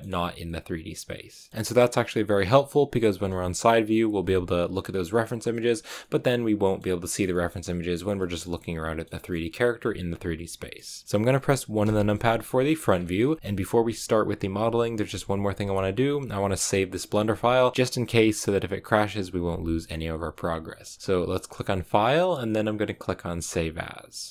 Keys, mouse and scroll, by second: 3.1 KP_1, 4.7-5.8 scroll up 3, 5.9 middle click, 6.8 scroll down 3, 7.0-11.7 shift+middle drag, 11.7 KP_1, 12.6 shift+middle click, 12.8-13.3 scroll up 3, 13.3-24.3 shift+middle drag.